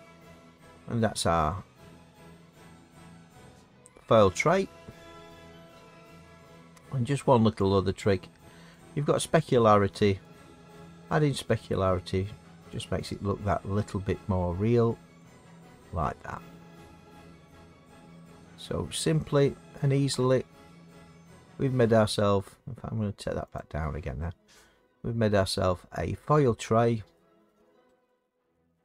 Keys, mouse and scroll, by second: 2.2 middle click, 2.4 middle click, 2.5 middle click, 3.9 middle click, 8.7 click, 10.2 click, 12.7 click, 19.1 middle click, 19.5 middle click, 19.5 middle click, 19.7 middle click, 21.8 middle click, 23.5 click, 27.4 middle click, 27.6 middle click, 27.9 middle click.